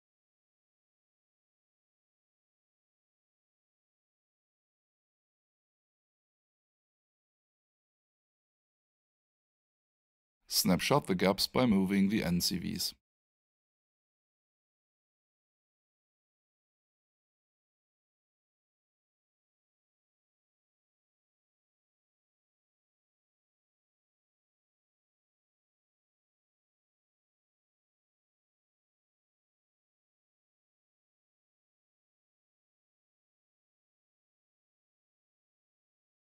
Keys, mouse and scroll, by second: 0.0 alt+shift+click, 2.1 alt+shift+right click, 2.8 alt+shift+click, 3.4 alt+shift+middle click, 5.9 click, 20.5 alt+shift+right click, 21.4 alt+shift+middle click, 22.9 alt+shift+click, 23.3 alt+shift+right click, 25.9 click, 28.8 ctrl+click, 34.3 alt+shift+right click, 35.3 alt+click, 36.1 alt+shift+middle click.